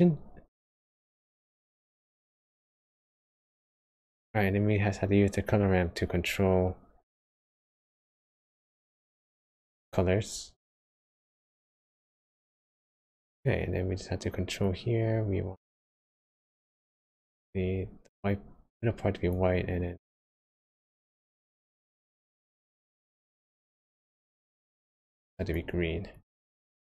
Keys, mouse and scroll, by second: 1.0 click, 2.3 click, 5.4 click, 8.4 click, 10.9-11.4 scroll up 3, 11.9-12.3 scroll down 2, 12.5 shift+middle click, 14.6 click, 20.4 click, 26.1 click.